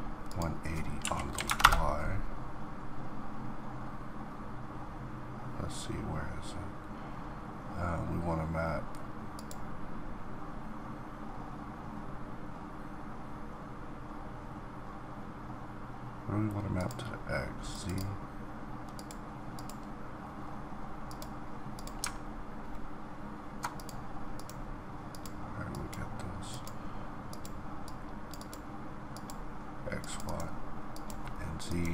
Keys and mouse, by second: 0.9-6.2 drag, 9.6-11.8 drag, 19.3-28.0 drag.